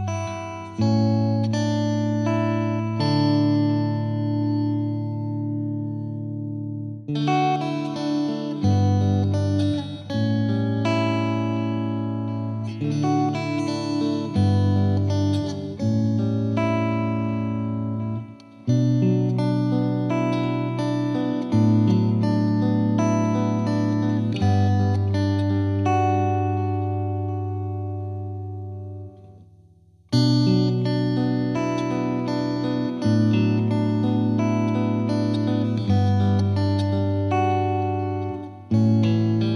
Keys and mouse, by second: 0.3 click, 1.0 click, 1.7 click, 2.5 click, 3.8 click, 5.6 click, 6.2 click, 7.4 click, 7.9-9.2 drag, 9.9 click, 10.3 click, 11.3 ctrl+click, 12.6 click, 12.7 click, 13.7 click, 14.2 click, 14.4 ctrl+z, 14.8 click, 16.4 click, 17.0 click, 17.4 click, 17.8 F2, 18.0 click, 18.9 click, 19.5 click, 20.2 click, 20.7 click, 21.0 click, 21.4 click, 22.1-23.4 drag, 24.3 click, 24.9 click, 26.0 click, 26.9 click, 27.7 click, 28.0 click, 28.4 click, 30.0 click, 30.4 click, 30.9 click, 31.5 click, 31.9 click, 32.8 click, 33.8 click, 34.5 click, 35.0 click, 36.0 click, 36.4 click, 38.2 click, 39.3 click.